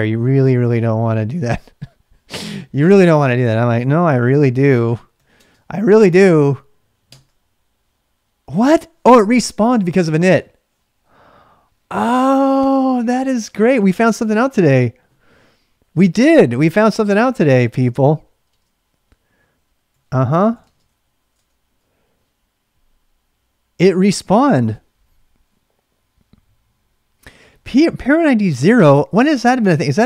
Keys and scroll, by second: 0.0-1.5 typing, 2.3 Left, 2.3 Up, 3.0 Left, 4.1 typing, 5.1 typing, 7.0 Return, 18.1-21.5 typing.